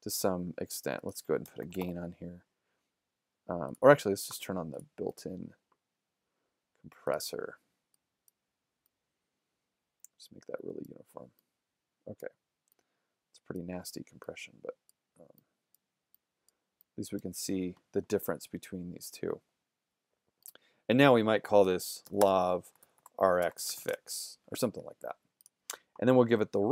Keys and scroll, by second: 1.2-2.3 typing, 21.4-24.3 typing.